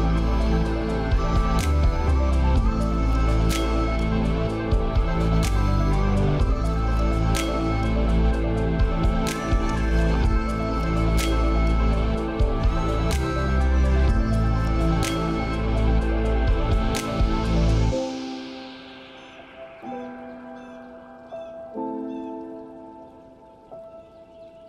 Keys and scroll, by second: 18.9 ctrl+a, 21.3 ctrl+d.